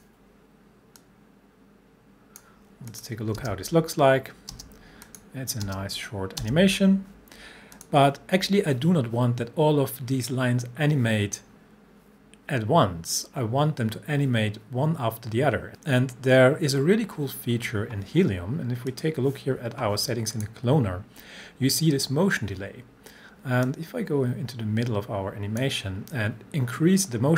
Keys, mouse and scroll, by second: 3.4 space, 5.1 click, 5.7 space, 7.8 click, 18.9 click, 23.6-25.8 drag.